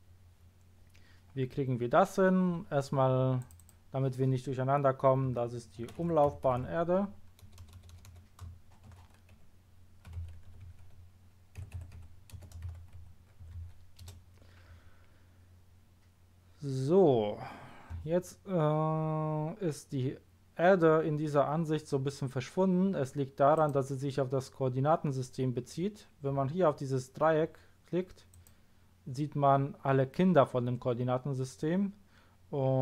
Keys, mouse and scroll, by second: 3.4 click, 3.6 click, 6.2 m, 6.4 l, 6.5 a, 7.4 BackSpace, 8.8-10.5 typing, 11.6-13.5 typing, 14.0 Return, 23.5 click, 28.3 click.